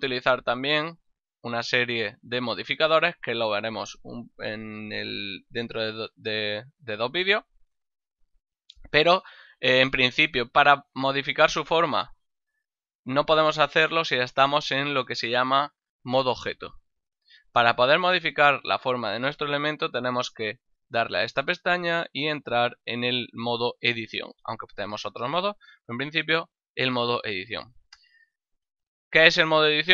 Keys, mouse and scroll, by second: 1.0 click, 8.7 click, 20.5 click.